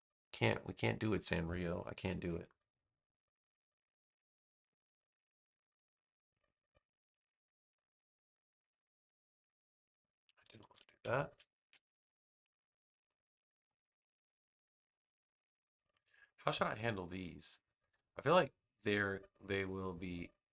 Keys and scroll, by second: 2.1 super+v, 10.5 super+z, 11.1 super+z.